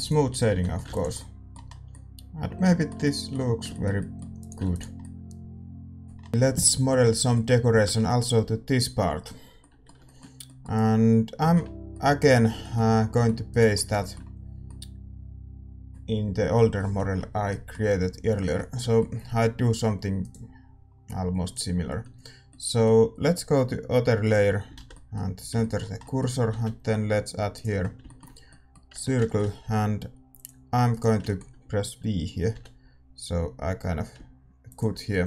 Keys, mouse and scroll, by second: 0.0-2.1 drag, 0.5 a, 0.5-28.0 middle drag, 1.1 ctrl+s, 4.3-6.1 drag, 4.9 ctrl+s, 6.3 click, 13.5-16.4 drag, 20.2-22.4 right drag, 21.4-26.0 drag, 24.7 shift+c, 27.6 shift+a, 28.9 Tab, 29.6 a, 30.3-32.5 drag, 30.8-32.7 right drag, 32.5-33.7 middle drag, 32.5 v, 35.1 scroll up 1.